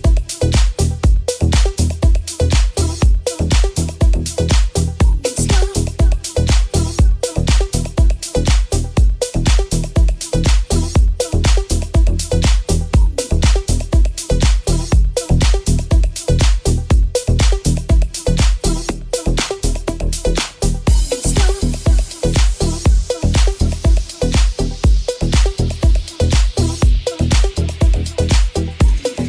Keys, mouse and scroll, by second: 0.1 i, 2.2-6.4 ctrl+middle drag, 6.2 Tab, 6.4 right click, 6.4-19.8 middle drag, 10.2 Tab, 13.3 ctrl+r, 17.7 Tab, 18.8 w, 19.8 right click, 19.8-29.2 middle drag.